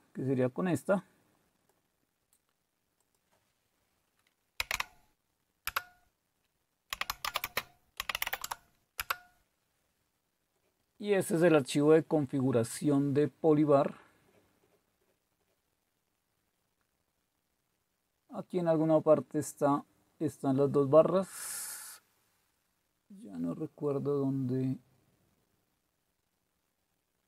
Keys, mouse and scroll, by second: 3.0 click, 4.3-5.2 typing, 5.6 Return, 6.7-8.7 typing, 9.0 Return, 12.7-18.5 scroll up 1, 18.5-22.1 scroll up 1, 22.1-22.8 typing, 22.1-23.7 scroll up 1, 23.7-24.5 scroll up 1, 24.5-26.5 scroll up 1, 26.5-26.8 scroll up 1.